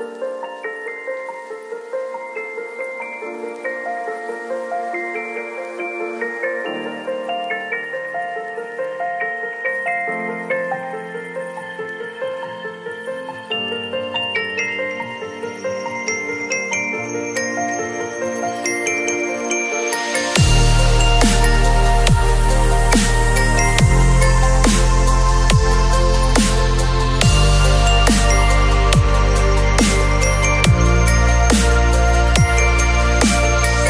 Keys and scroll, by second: 0.6 ctrl+a, 0.9 ctrl+c, 1.1 ctrl+w, 3.2 ctrl+v, 3.5 ctrl+t, 13.4 space, 18.8 space, 24.9 ctrl+shift+n, 25.2 Return, 26.5 b, 33.6 v.